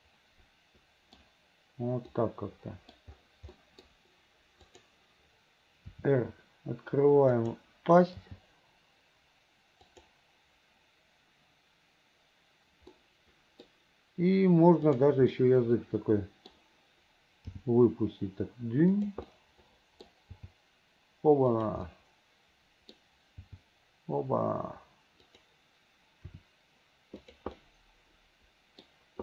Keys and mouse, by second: 2.3 middle click, 3.8 middle click, 4.7 click, 6.0 r, 8.3 g, 13.2 middle click, 15.0 click, 15.4-16.6 middle drag, 17.7 g, 19.4 click, 21.1 g, 22.1 click, 23.5 g, 26.4 r, 27.8-29.0 middle drag.